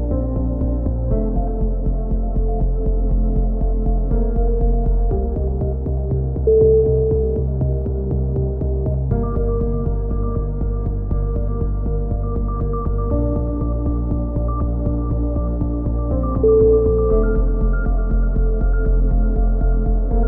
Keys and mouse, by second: 0.7 click, 1.2 a, 1.4 z, 1.5 Tab, 1.6 a, 2.1 z, 2.2-3.3 drag, 4.2 Tab, 4.4 right click, 4.8 click, 5.7 a, 5.8 Tab, 6.0 click, 6.7 KP_3, 7.0 click, 7.0 z, 8.1 Tab, 8.7-9.8 drag, 8.7 right click, 9.9 Tab, 10.1 a, 10.3 a, 10.4 click, 13.3 Tab, 13.4 right click, 14.9 right click, 15.0 click, 15.6 right click, 16.3 shift+d, 16.3 z, 16.4 click, 16.9 KP_7, 17.0 z, 18.0-19.7 drag, 18.4 ctrl+z, 19.9 click.